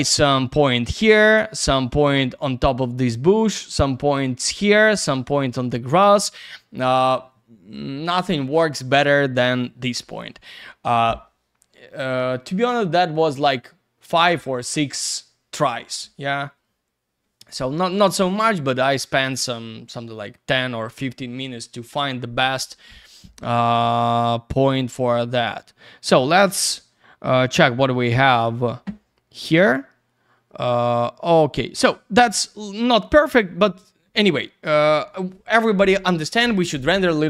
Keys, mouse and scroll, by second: 28.5 click, 29.1-30.3 scroll up 1, 30.3-32.1 scroll down 1.